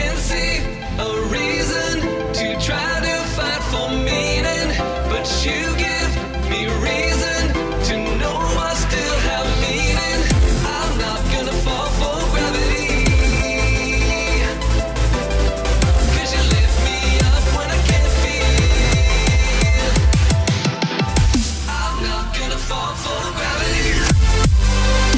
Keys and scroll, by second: 4.1 space, 5.3 space, 14.7 space, 16.1 space, 16.5 space, 17.6 space.